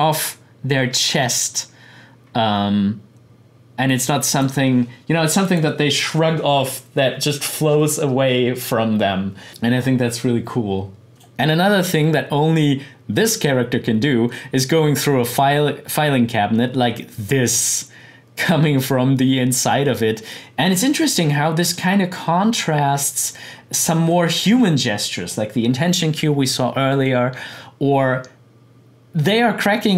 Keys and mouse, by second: 5.4 click, 11.1 click, 20.3-26.9 drag.